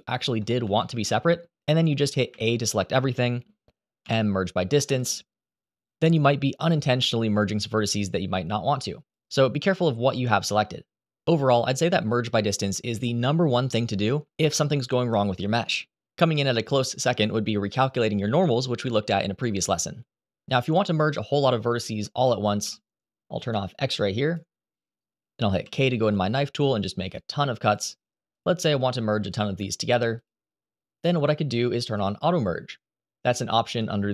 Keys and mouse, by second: 0.2 shift+middle click, 0.5 middle click, 2.0 a, 3.7 m, 6.5-8.9 drag, 10.9 click, 11.8 click, 12.6 Delete, 20.8 KP_7, 25.0 k.